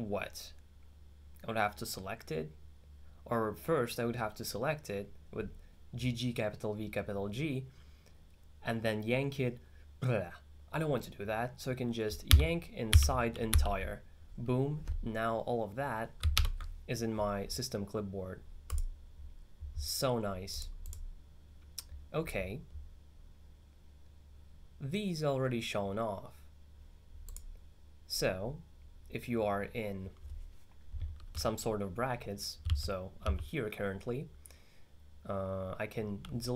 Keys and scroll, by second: 12.4 y, 13.0 i, 13.6 e, 32.7-33.8 typing, 36.4-36.5 typing.